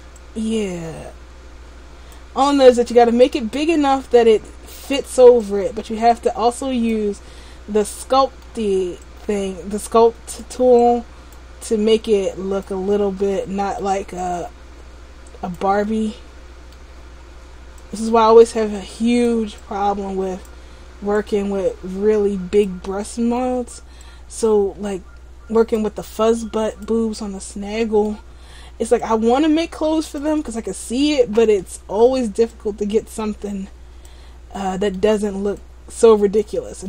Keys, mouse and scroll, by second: 0.2 click, 2.6 middle click, 3.3 click, 5.5 click, 7.5 middle click, 9.2 click, 10.9 click, 11.8 click, 13.0 middle click, 14.3 click, 16.0 middle click, 17.9 click, 19.7 click, 21.3 click, 23.0 middle click, 24.1 click, 26.8 click, 27.2 middle click, 29.2 click, 30.5 middle click, 31.7 middle click, 32.6 click, 34.6 middle click, 35.7 click.